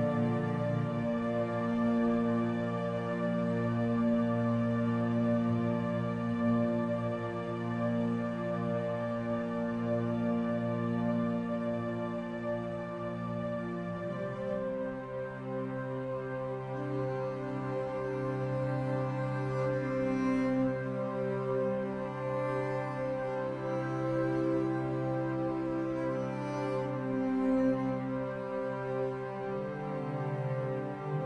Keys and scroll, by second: 14.4 F10.